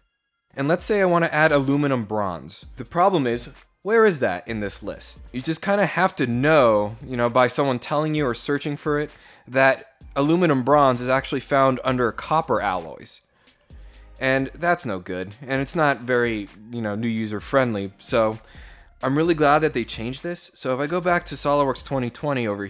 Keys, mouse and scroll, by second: 4.5 scroll down 1, 5.0 scroll down 1, 10.1 click, 13.0 click, 14.0 click, 20.6 alt+Tab.